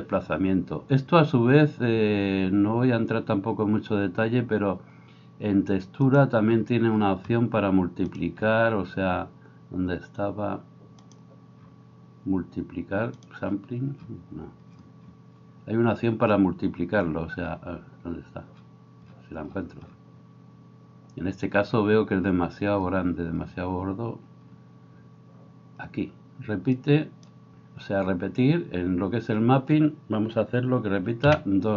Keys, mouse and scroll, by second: 6.3-8.2 middle drag, 8.2-31.7 drag.